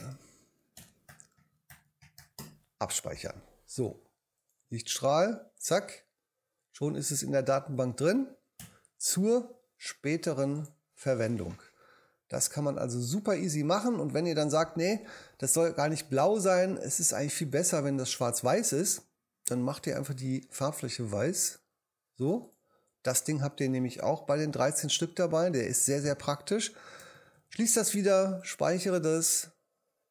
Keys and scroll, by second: 0.0-2.9 typing, 8.6 BackSpace, 27.2 super+w.